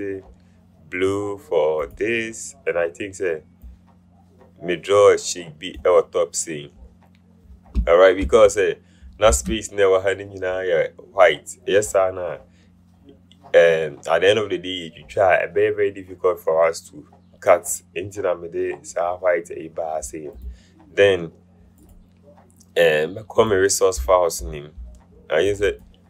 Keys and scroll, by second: 9.7 v.